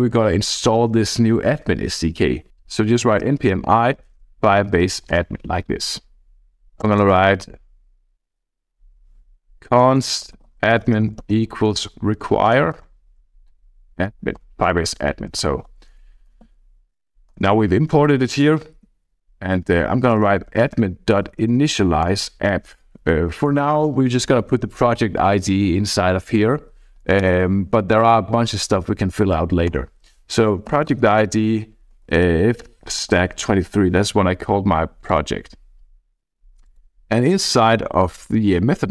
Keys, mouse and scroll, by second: 2.5-5.5 typing, 6.4 click, 6.8 Return, 6.9 Return, 7.4 Page_Down, 8.0 Up, 8.1 Up, 8.3 Up, 8.4 Up, 8.6 Up, 8.8 Up, 8.9 Up, 9.2-14.2 typing, 14.4 Return, 14.9 Right, 15.0 Right, 15.3 shift+;, 15.9 BackSpace, 16.4 shift+;, 17.0 Down, 17.3 Return, 17.4 Return, 19.8-21.9 typing, 22.0 Return, 23.4 {, 27.2 ctrl+space, 28.4 Down, 28.6 Down, 28.7 Down, 28.9 Down, 29.7 Return, 30.7-33.9 typing, 35.0 click, 36.6 click, 38.0-38.9 drag.